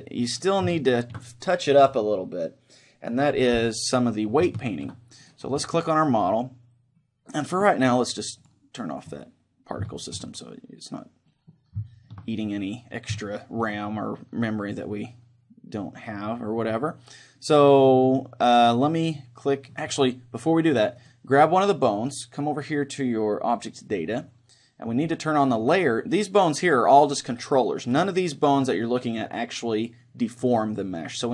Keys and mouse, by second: 0.6-3.4 right drag, 0.9-3.4 middle drag, 4.5-6.8 middle drag, 5.3-7.3 right drag, 8.5-10.0 drag, 9.1-14.1 middle drag, 15.5-16.9 middle drag, 19.7-20.7 drag, 21.0-23.1 right drag, 23.5-25.5 drag, 24.9-26.7 middle drag.